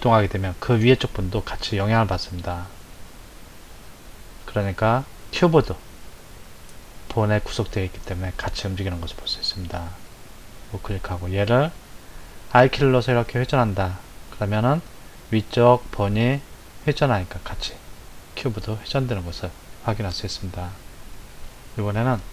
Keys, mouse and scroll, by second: 12.5 r, 20.0 click, 22.1 click.